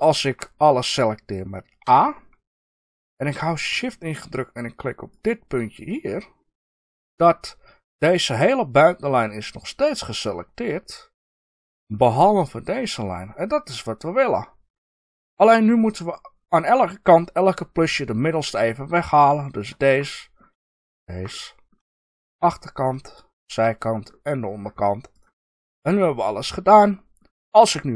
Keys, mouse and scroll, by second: 1.8 a, 5.0 shift+click, 18.4-19.5 middle drag, 19.5 shift+click, 20.0 middle click, 20.9 shift+click, 21.2 middle click, 21.9 shift+click, 22.3 middle click, 23.3 shift+click, 24.0-25.0 middle drag, 25.0 shift+click, 25.8-27.9 middle drag.